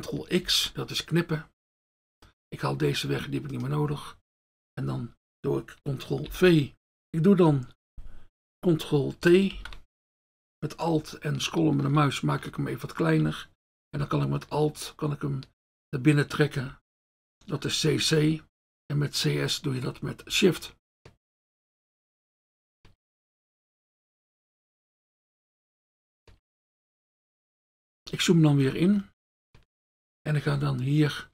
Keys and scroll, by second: 0.5 ctrl+x, 6.3 ctrl+v, 9.5 ctrl+t.